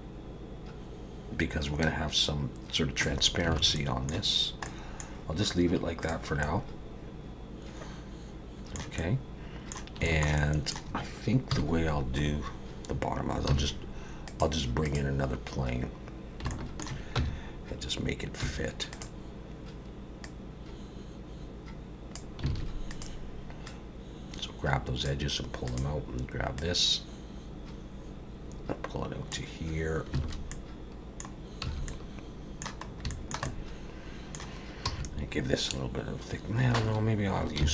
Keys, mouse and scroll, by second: 3.6 alt+a, 3.8 middle click, 4.3 scroll down 2, 4.6 middle click, 6.0 click, 6.4 middle click, 9.0 middle click, 10.0 shift+middle click, 10.4 middle click, 11.5 KP_7, 12.3-13.1 scroll down 1, 13.5 shift+a, 16.5 shift+middle click, 17.2 Tab, 18.4 2, 18.9 click, 20.2 click, 22.5 alt+a, 22.9 click, 23.7 click, 25.8 click, 26.6 click, 30.2 alt+a, 30.5 middle click, 31.7 a, 31.9 middle click, 32.9 scroll up 2, 33.1 shift+middle click, 33.5 middle click, 34.9 e, 37.6 ctrl+z.